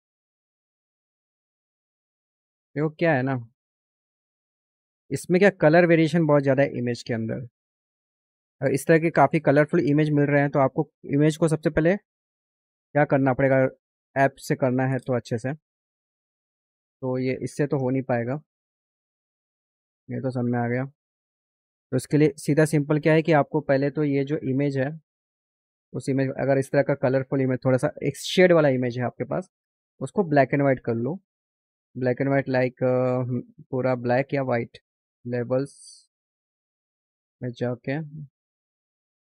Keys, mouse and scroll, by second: 3.0 click, 7.1 ctrl+d, 8.7 click, 9.1 click, 10.3 click, 10.9 click, 11.4 click, 13.1 click, 14.1 click, 16.9 click, 17.7 Delete, 18.3 click, 19.6 click, 20.7 click, 21.6 click, 25.4 click, 27.2 click, 36.7 click.